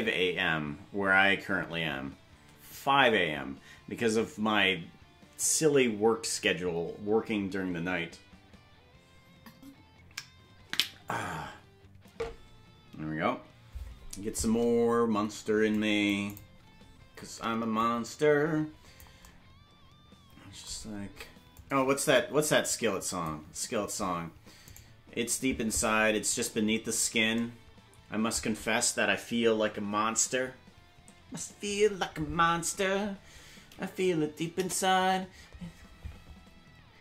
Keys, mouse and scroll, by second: 15.8 click, 17.8-19.0 drag, 21.6-23.3 drag, 24.8 right click, 34.6 KP_0.